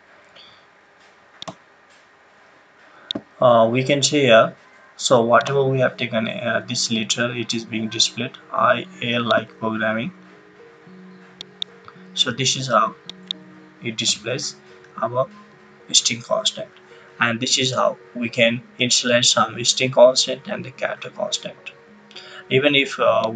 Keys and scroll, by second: 14.0 BackSpace.